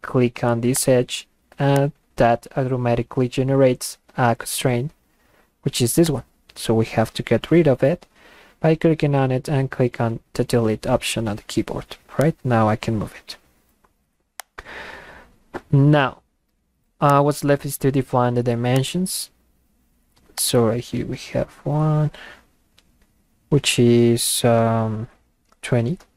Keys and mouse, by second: 0.8 click, 1.8-6.1 drag, 12.2-14.0 drag, 14.4 click, 17.1 click, 18.7 click, 20.4 click.